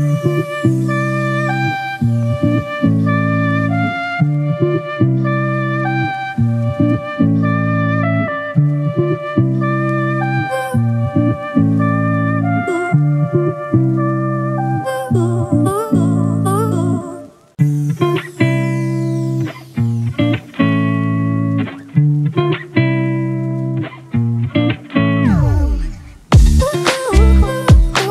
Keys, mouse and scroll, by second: 0.5 ctrl+=, 0.9 ctrl+-, 2.8 ctrl+click, 3.2 right click, 5.8 double click, 21.6 alt+click, 27.3 right click.